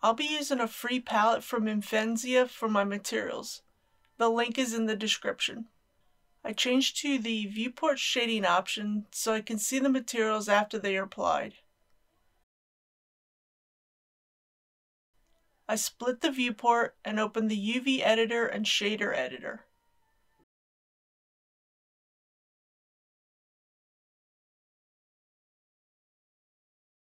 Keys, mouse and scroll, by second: 7.1 KP_1, 11.6-18.1 drag, 18.4 shift+middle click, 20.4 click, 21.1 shift+middle click, 22.0 click, 26.7 n.